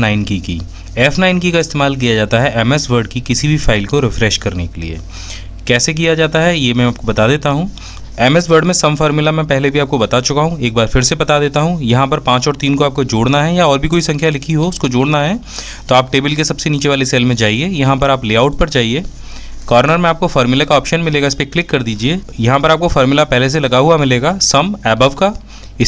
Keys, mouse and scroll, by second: 0.0 typing, 2.1 F9.